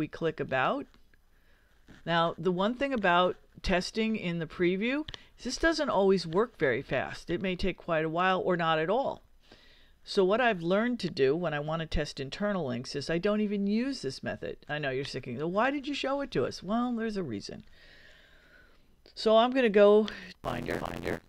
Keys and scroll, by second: 19.5 super+Tab.